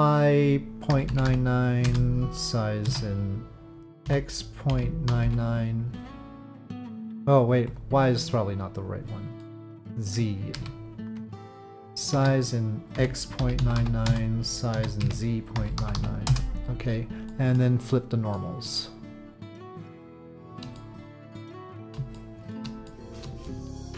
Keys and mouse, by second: 2.8 s, 7.7-8.8 drag, 9.4 middle click, 10.5 ctrl+z, 12.1 s, 14.7 s, 17.4 click, 18.3 click, 22.1 shift+middle click, 22.9 shift+middle click, 23.4-23.9 middle drag.